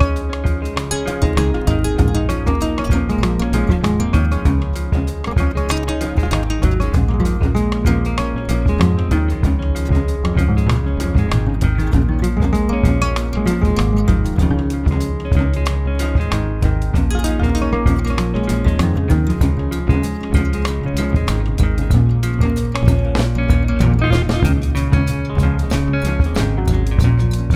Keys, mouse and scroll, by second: 1.4 ctrl+z, 2.4 middle click, 3.1 click, 4.0 ctrl+z, 4.2 click, 4.6-6.7 middle drag, 6.7-9.2 drag, 9.2 ctrl+z, 9.3 ctrl+z, 9.5 ctrl+z, 9.6 ctrl+z, 9.8 ctrl+z, 10.2 ctrl+z, 10.5 middle click, 11.3-15.2 drag, 15.2 middle click, 15.7 click, 16.6 ctrl+z, 17.9-19.0 drag, 19.0 middle click, 19.4 ctrl+z, 19.8 click, 20.0 middle click, 20.2 ctrl+z, 20.4 click, 21.0 ctrl+z, 21.1-22.5 drag, 22.5 middle click, 23.4 ctrl+z, 23.8-25.1 drag, 25.1 middle click, 25.6 ctrl+z, 26.1-27.5 middle drag.